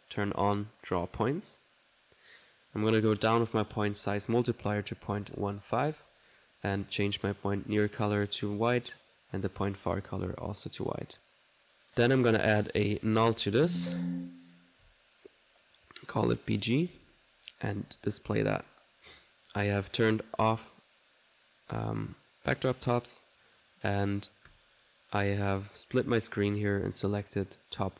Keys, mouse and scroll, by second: 0.9 click, 3.1 click, 7.0 click, 7.9 click, 9.3 click, 10.1 click, 11.9 middle click, 12.7 click, 13.2-14.0 typing, 14.0 alt+click, 15.4 alt+click, 15.4 typing, 15.7 click, 16.5 click, 17.9 click, 18.5 middle click, 18.7 click, 19.5 click, 20.0 right click, 24.5 click, 26.9 click.